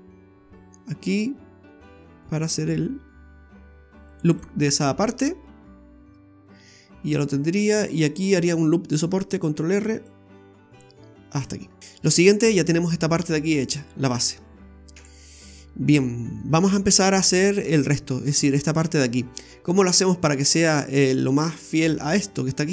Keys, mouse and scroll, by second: 4.3 click, 4.7-5.2 scroll up 4, 5.2 middle click, 6.3 scroll down 1, 6.7 middle click, 9.6 ctrl+r, 11.6-12.1 scroll down 4, 11.8 shift+middle click, 14.1 scroll down 1, 14.9 KP_1, 15.6-16.0 scroll down 3, 16.0 shift+middle click, 16.6 scroll up 2.